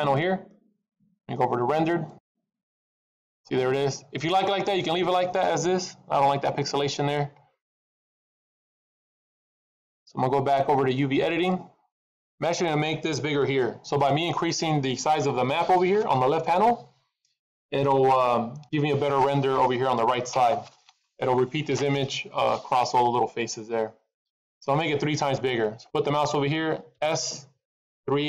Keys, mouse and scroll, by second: 0.0 click, 2.0 click, 2.9 middle click, 4.1 scroll up 3, 6.2 middle click, 8.0 middle click.